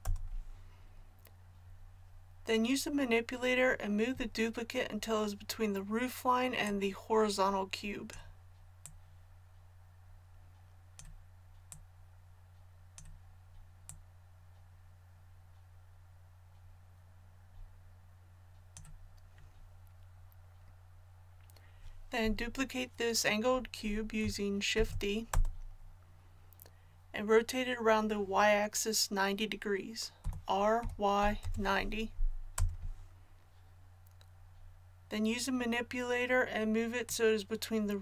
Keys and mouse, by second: 6.6-8.5 drag, 8.8-10.7 drag, 11.7-15.7 drag, 24.7 shift+d, 30.2 r, 37.1-38.0 drag.